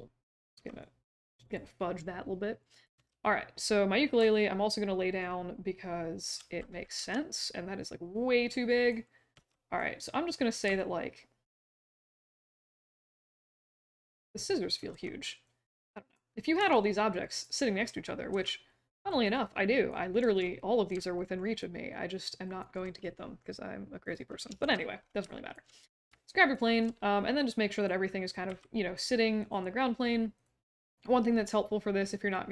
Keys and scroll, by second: 0.5 w, 2.9 e, 4.1 j, 6.9 r, 9.3 w, 14.9 r, 16.5 q, 18.3 r, 20.2 q, 24.6 shift+h, 28.4 w.